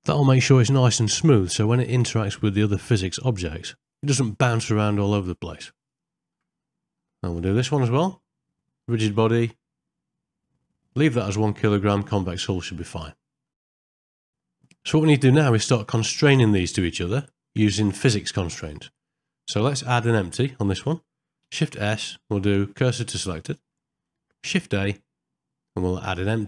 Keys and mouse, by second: 5.9 ctrl+middle click, 6.7 middle click, 8.0 click, 9.4 click, 13.5 middle click, 13.7 shift+middle click, 13.8 ctrl+middle click, 15.6 ctrl+middle click, 19.4 click, 21.7 shift+s, 24.6 shift+a.